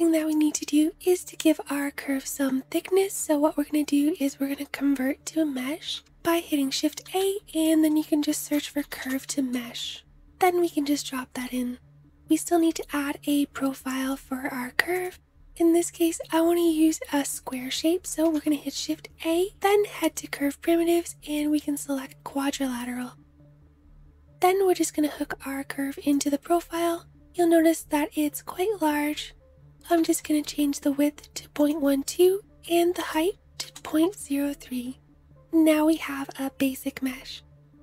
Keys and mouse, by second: 3.0-3.8 shift+drag, 3.8-5.8 middle drag, 5.4 shift+a, 10.3-11.5 drag, 14.6-23.7 shift+drag, 18.2 shift+a.